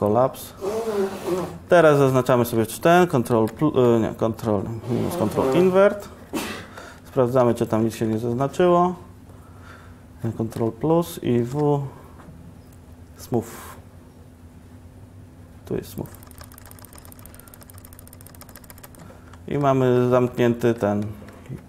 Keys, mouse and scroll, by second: 1.3 1, 3.6 ctrl+KP_Decimal, 4.5 ctrl+KP_Decimal, 5.6 ctrl+i, 8.0 z, 10.7 ctrl+KP_Decimal, 11.6 w, 16.3-19.3 typing, 19.5 Tab.